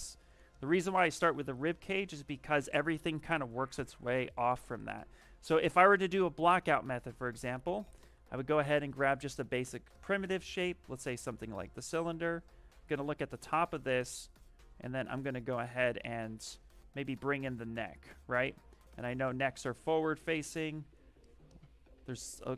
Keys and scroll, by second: 7.0-8.2 typing, 10.8 s, 15.7 w.